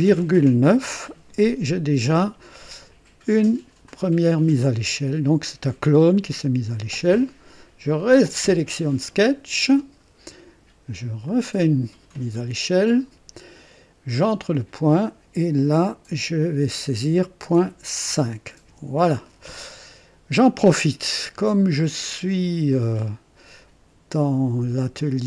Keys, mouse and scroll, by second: 0.1 ,, 0.7 KP_9, 3.8 click, 8.0 click, 11.2 click, 14.2 click, 17.4-18.6 typing, 18.6 KP_Enter, 20.6-21.0 scroll up 1, 21.5-22.3 right drag.